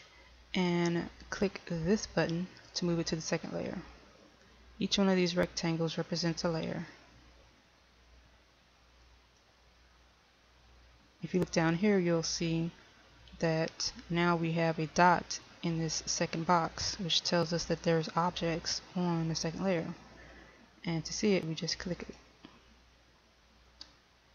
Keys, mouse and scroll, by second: 2.5 click.